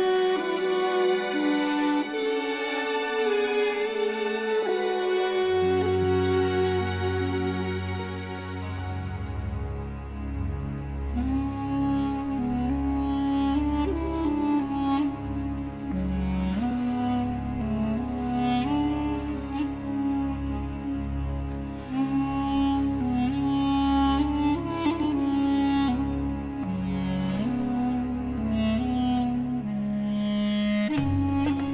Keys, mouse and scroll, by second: 0.4 click, 2.5 click, 3.4 click, 4.7 click, 5.7 click, 6.8 click, 7.7-10.0 drag, 10.4 scroll down 1, 10.8 scroll up 2, 11.3 click, 12.8 click, 13.4 click, 13.9 space, 14.6 click, 15.5 space, 16.2 click, 16.5 click, 21.4 0, 22.6 1, 25.1 click, 27.0 click, 29.4 click, 31.1 click.